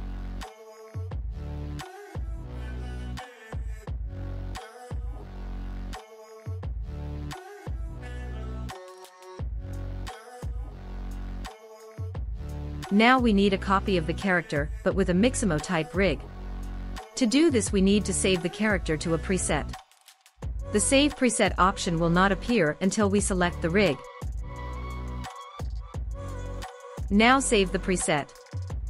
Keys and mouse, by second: 1.8 click, 3.9 click, 4.7 right click, 6.7 right click, 9.6-10.2 right drag, 11.5 right click, 13.3 middle click, 15.1 middle click, 15.6-16.3 middle drag, 21.8 click, 23.4-27.7 drag.